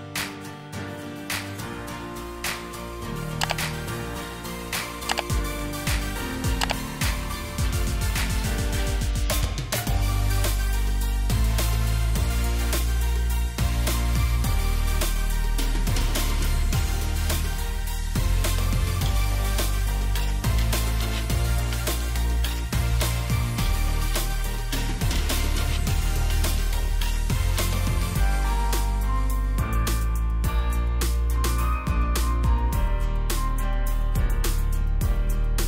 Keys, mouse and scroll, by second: 1.0 shift+click, 8.1 ctrl+z, 15.8 right click, 23.1 shift+click, 26.5 alt+shift+click, 30.7 right click.